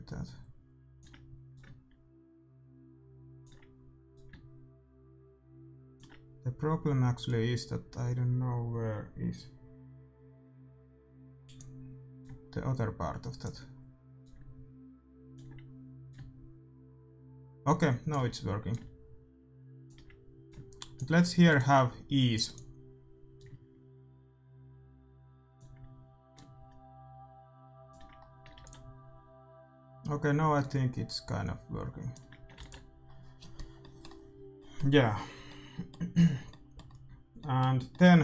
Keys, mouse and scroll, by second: 1.7-3.3 drag, 4.1-6.0 drag, 7.2-9.1 drag, 12.1-14.0 drag, 14.3-16.0 drag, 16.2-17.8 drag, 18.7-23.2 drag, 23.4-25.2 drag, 26.4-28.2 drag, 28.2-30.5 middle drag, 28.6 ctrl+s, 30.5-32.3 drag, 32.5 ctrl+s, 33.7-36.3 middle drag.